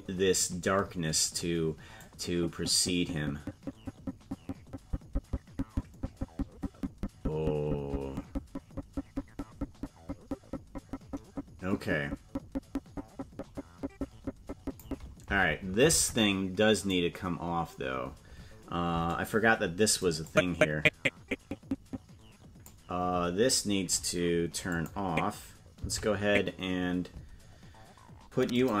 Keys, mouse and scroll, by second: 0.1 click, 2.5-15.2 drag, 16.3 ctrl+Tab, 17.3 right click, 20.4-23.0 drag, 25.3 click, 26.4 Left.